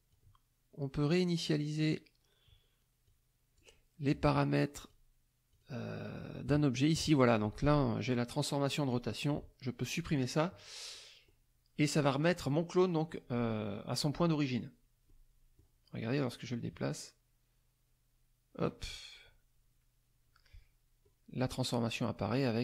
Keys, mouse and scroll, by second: 0.1-1.9 drag, 3.0 click, 4.8 click, 5.5 click, 7.4 click, 10.1 click, 10.9 middle click, 10.9-11.5 scroll up 1, 12.1 middle click, 12.1-12.5 scroll up 1, 13.1 middle click, 13.1-13.5 scroll up 1, 14.2 click, 15.1 click, 16.4-18.8 drag, 21.0 click.